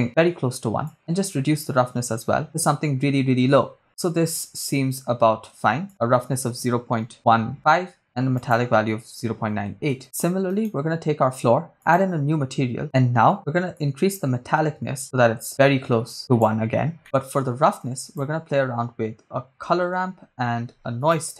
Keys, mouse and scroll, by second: 0.8-3.8 drag, 5.9-7.9 drag, 8.4-10.0 drag, 10.7-12.3 drag, 10.7 right click, 12.8-13.4 scroll down 2, 13.7-16.5 drag, 17.0 middle click, 17.6 shift+a.